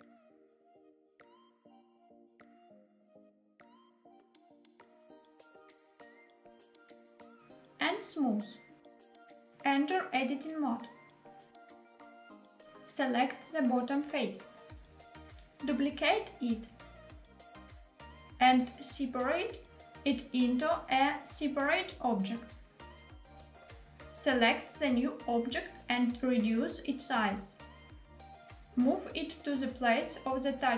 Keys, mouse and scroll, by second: 1.0 click, 1.3 g, 1.6 x, 3.7 click, 4.0 g, 4.1 z, 6.4 click, 7.5 right click, 9.0-9.5 middle drag, 9.8 Tab, 11.5-12.2 middle drag, 12.5 click, 13.3-15.3 middle drag, 15.8 shift+d, 17.7 click, 19.5 p, 21.3 middle click, 22.9 Tab, 24.8 click, 26.1 s, 28.3 click, 28.8 middle click, 28.8 g, 28.8 z, 29.8 click, 30.2 g, 30.2 y.